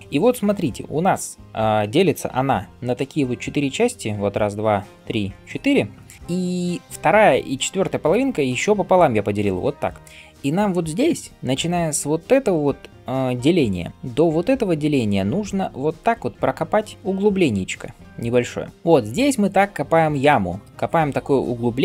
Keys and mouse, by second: 2.4 d.